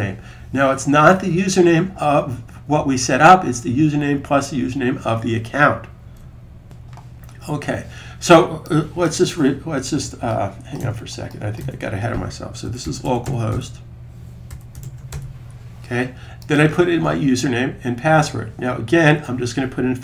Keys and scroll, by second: 12.5-14.8 typing.